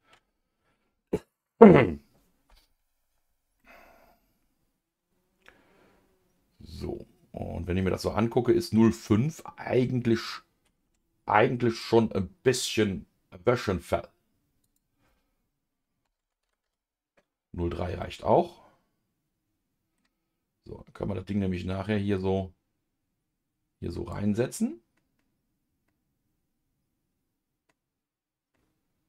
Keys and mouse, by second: 3.6-8.8 middle drag, 11.7 Tab, 11.7-13.0 drag, 14.6-17.9 drag, 18.0-20.0 middle drag, 22.2-24.4 drag, 24.4-29.0 middle drag.